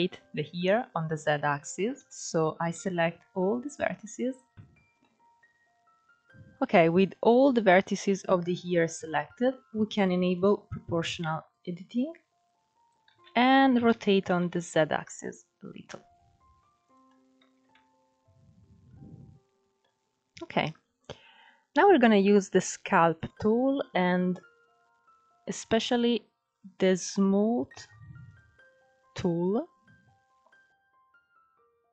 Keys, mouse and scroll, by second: 0.0-1.6 middle drag, 1.6 KP_3, 2.2 scroll up 3, 2.4 alt+z, 3.1 click, 4.5 middle click, 5.1-5.9 scroll up 3, 5.9-6.4 scroll down 1, 6.4-8.9 middle drag, 8.9 scroll down 2, 10.0 click, 11.2 click, 12.7 ctrl+z, 13.6 r, 16.8 scroll down 5, 17.1 Tab, 17.4-19.5 middle drag, 19.5-20.4 scroll up 2, 20.4-20.9 scroll up 2, 20.9 scroll down 2, 21.4-22.8 scroll up 1, 22.8-30.8 drag, 30.8-31.1 scroll down 1, 31.1 ctrl+s, 31.4 scroll up 4, 31.7 middle click.